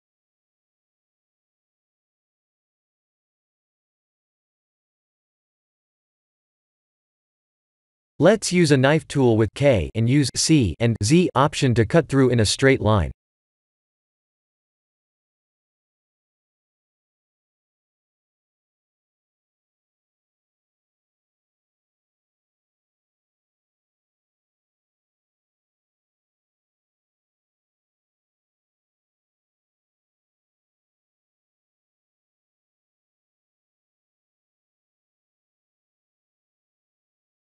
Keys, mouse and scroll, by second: 0.0 Tab, 0.4 ctrl+r, 2.4 KP_1, 2.9 shift+z, 4.2 k, 15.8 1, 16.2 click, 16.9 click, 17.5 shift+z, 17.9 middle click, 20.6 KP_3, 21.2 shift+z, 22.0 click, 22.3 b, 24.6 g, 28.6 shift+z, 29.0 middle click, 30.2 click, 30.5 middle click, 32.8 ctrl+z, 33.1 ctrl+z, 34.0 middle click, 34.2 middle click, 34.4 middle click, 34.5 middle click, 36.8 middle click.